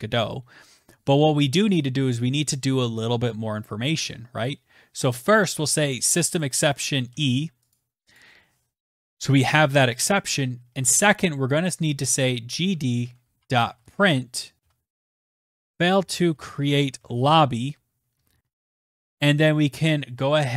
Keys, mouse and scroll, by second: 4.1 click, 4.6 click, 5.4 e, 6.0 click, 6.4 click, 10.2-17.0 typing, 17.2 Return, 19.7 click, 20.5 typing.